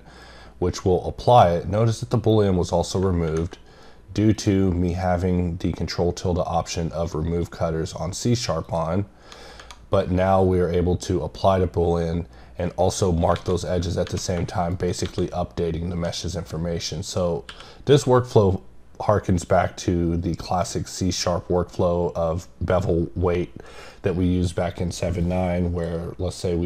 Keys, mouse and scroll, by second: 4.4 click, 8.6 click, 14.7 right click, 25.2 right click.